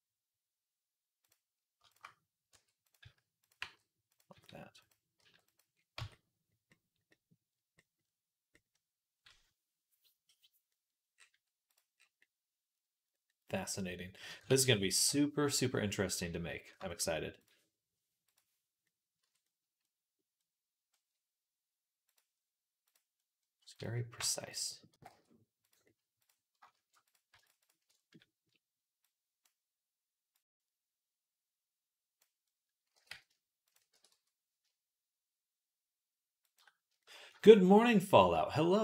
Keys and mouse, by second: 1.1 click, 2.4-5.0 typing, 4.2-6.5 drag, 5.8 Tab, 6.6 click, 6.7 click, 10.5-17.3 middle drag, 14.4 ctrl+s, 17.3 click, 18.2-21.9 middle drag, 19.1 Tab, 21.9 click, 23.0 middle click, 23.6 click, 23.7 middle click, 24.3 shift+click, 24.5-26.1 middle drag, 24.8 g, 26.1 click, 27.0-28.9 alt+shift+middle drag, 28.9-33.6 drag, 32.8 g, 33.6-37.6 middle drag, 33.8 r.